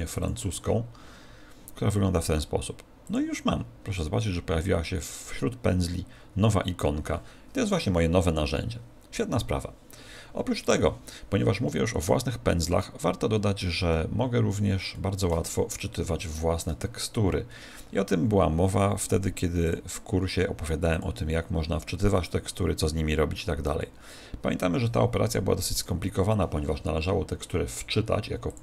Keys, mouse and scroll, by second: 0.2 click, 3.0 click, 11.7 middle click, 14.9 middle click, 19.6 click, 20.9 click, 27.6 click, 28.5 click.